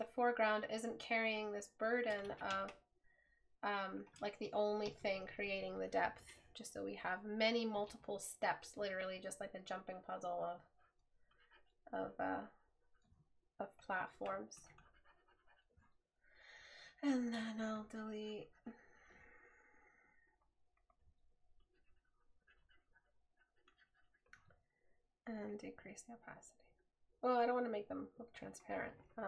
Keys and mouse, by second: 8.0 right click.